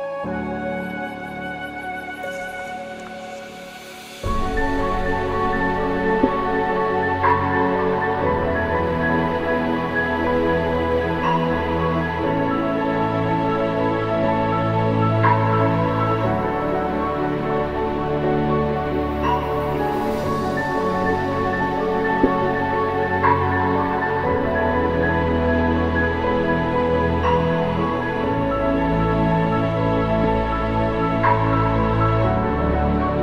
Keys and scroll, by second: 2.3 ctrl+=, 5.4 alt+BackSpace, 5.8 ctrl+-, 11.4 alt+BackSpace, 11.8 ctrl+-, 12.5 ctrl+=, 17.5 alt+BackSpace, 17.7 ctrl+d, 18.1 ctrl+-, 31.0 ctrl+=, 31.5 ctrl+=.